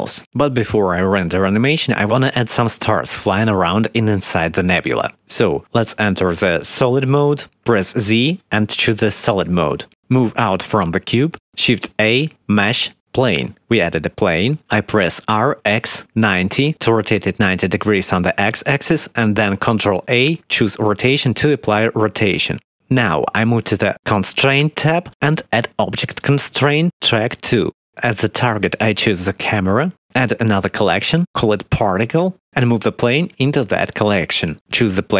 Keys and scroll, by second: 7.8 z, 10.9 ctrl+s, 11.7 shift+c, 12.0 shift+a, 15.1 r, 15.3 x, 15.8 9, 15.9 0, 19.7 ctrl+a, 32.2-32.6 typing, 32.7 Return.